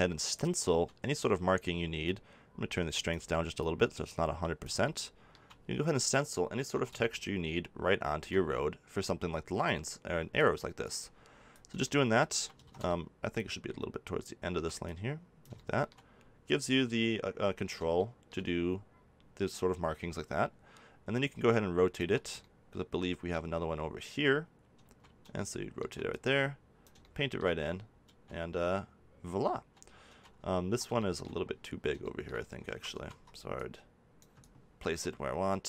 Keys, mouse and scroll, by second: 2.0-5.2 drag, 6.7 ctrl+z, 9.6-12.3 drag, 11.8 middle click, 12.6 ctrl+z, 14.8 click, 15.5 middle click, 16.1 click, 16.4 middle click, 19.6 middle click, 20.0-21.7 right drag, 22.3 middle click, 24.2-26.0 middle drag, 26.0-27.8 drag, 27.8 middle click, 31.0 middle click, 32.6 ctrl+z, 32.9 ctrl+z.